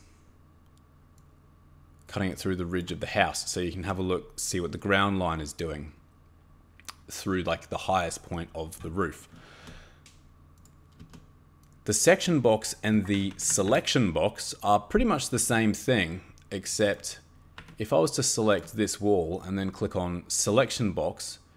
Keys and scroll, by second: 13.3 Escape, 13.5 Escape, 13.7 Escape, 17.6 Escape.